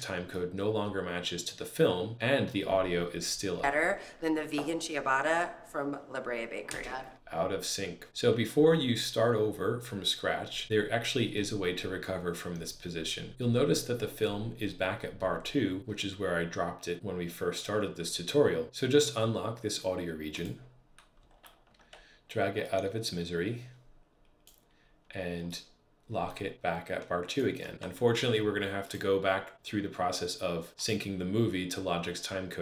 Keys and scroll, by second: 3.4 space, 21.5 super+Page_Up, 27.7 super+Page_Down.